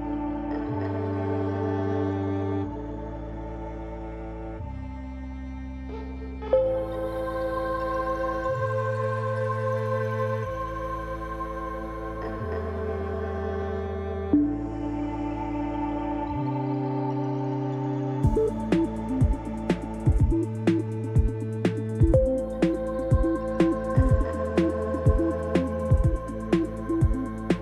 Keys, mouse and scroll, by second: 0.4 scroll up 1, 1.8-4.6 middle drag, 3.5 KP_Decimal, 4.6 click, 4.7 middle click, 5.6-9.6 drag, 9.6-11.5 middle drag, 10.1-11.5 scroll down 2, 11.5-15.7 drag, 15.7-17.6 middle drag, 17.6-20.4 drag, 20.4-22.5 middle drag, 20.8-22.5 scroll down 2, 22.5-26.7 drag, 26.7-27.6 middle drag.